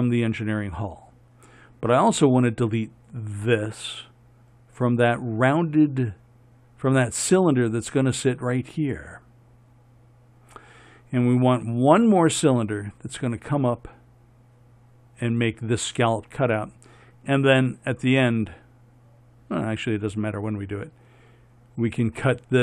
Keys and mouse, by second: 3.6-22.6 right drag.